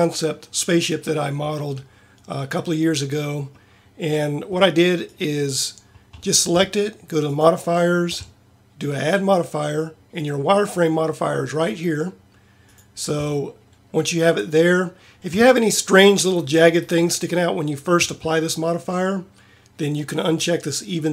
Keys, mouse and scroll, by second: 9.2-12.5 right drag.